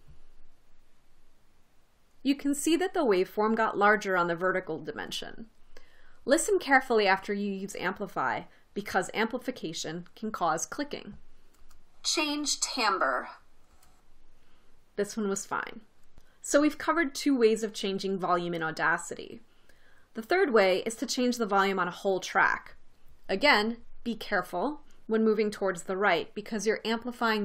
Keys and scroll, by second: 12.2 space, 14.3 space.